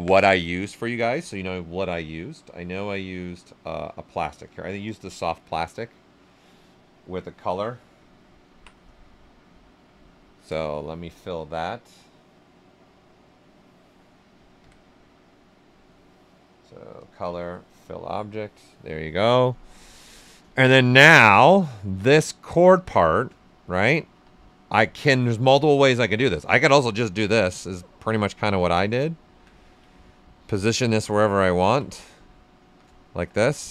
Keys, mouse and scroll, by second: 4.9 click, 4.9 typing, 8.9-14.5 right drag, 8.9 typing, 14.5 q, 16.9 click, 20.5 ctrl+right click, 21.5-23.3 right drag, 24.1 w, 26.3 ctrl+click, 27.4 click, 28.5 ctrl+right click, 29.1 ctrl+right click, 29.5 ctrl+right click, 29.8 right click, 30.7 click, 31.5 ctrl+click, 32.5 shift+f, 33.0 q.